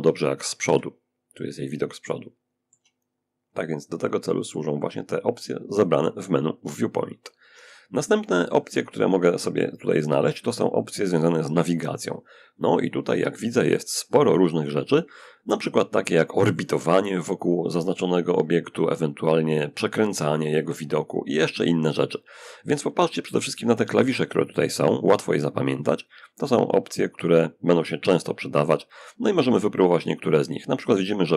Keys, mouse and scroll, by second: 1.3-2.5 shift+drag, 3.1 click.